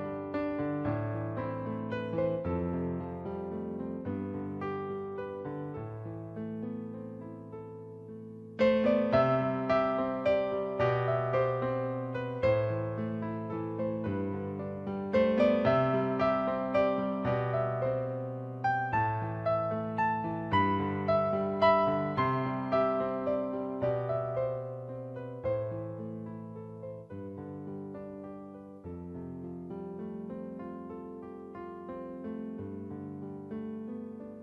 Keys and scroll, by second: 1.5 b, 9.6-10.4 typing, 33.5-34.4 typing.